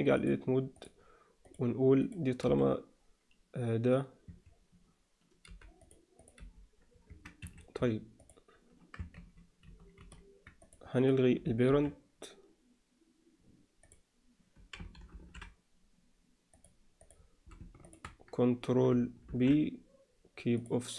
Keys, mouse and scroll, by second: 0.3-0.8 drag, 1.4 click, 2.0 click, 2.4 g, 6.2 click, 6.4 g, 8.2 click, 9.1 ctrl+z, 9.7 ctrl+z, 9.9 ctrl+z, 10.6 click, 11.7 alt+p, 15.1 alt+p, 17.0 click, 17.8 shift+click, 19.2 ctrl+p.